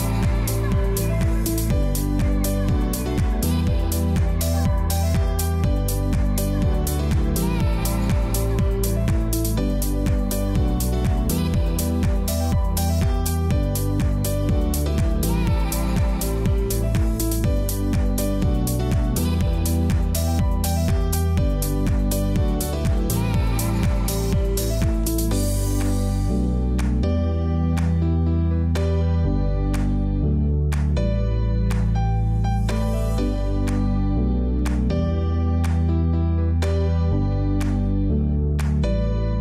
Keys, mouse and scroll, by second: 2.5 click, 24.2 click, 25.7 alt+click, 26.2-28.4 typing, 26.4 click, 26.7 click, 29.6-31.4 typing, 29.7 click, 31.5 click, 33.5 click, 33.7-34.9 typing, 34.0 click, 34.5 click, 36.6-39.4 typing, 36.9 click, 37.4 click, 38.2 click, 38.7 click, 39.2 click.